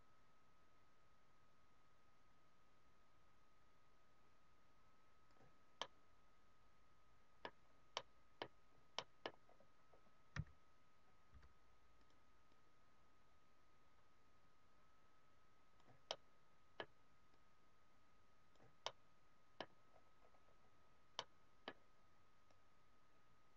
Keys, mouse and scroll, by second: 5.7 middle click, 7.5-7.8 scroll down 4, 8.5 scroll down 1, 9.0 middle click, 9.5 scroll up 1, 9.8 scroll down 1, 10.4 s, 11.3 f, 16.0 middle click, 17.4 click, 18.9 middle click, 19.9-21.0 scroll up 7, 21.1 middle click, 22.5 click.